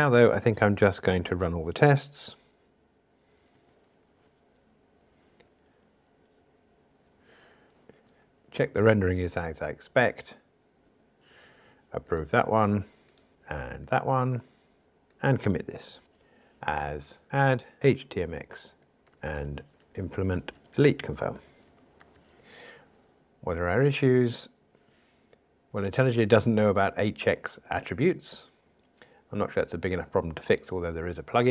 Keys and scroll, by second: 13.3 super+F11.